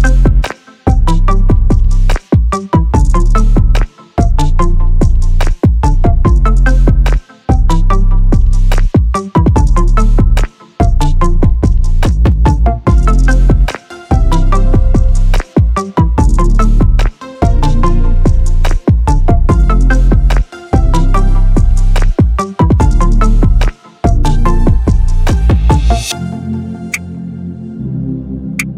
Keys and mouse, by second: 3.4 s, 8.4 Tab, 9.2 click, 11.2 shift+click, 11.9 Tab, 13.5 ctrl+r, 17.2 ctrl+r, 19.4 click, 22.5 shift+click, 22.8 shift+click, 25.4 g.